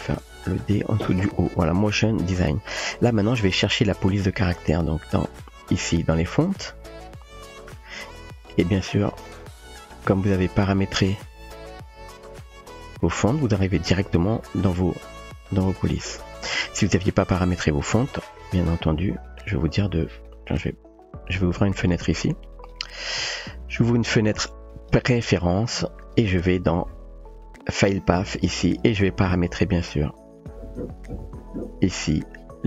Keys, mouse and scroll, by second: 0.1 space, 1.4 Tab, 5.5 click, 7.5 click, 9.3 click, 10.3 click, 12.4 click, 15.9 click, 19.3 click, 20.2 typing, 20.2 click, 21.1 click, 22.5-24.9 drag, 26.2 click, 27.4 click, 30.5 click.